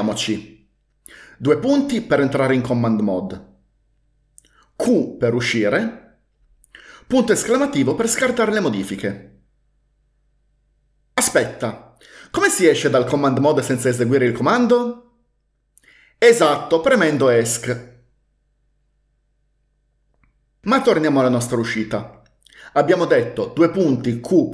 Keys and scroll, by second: 2.1 shift+;, 5.0 typing, 7.4 typing, 17.5 Escape, 17.7 Escape, 17.8 Escape, 23.6-24.5 typing.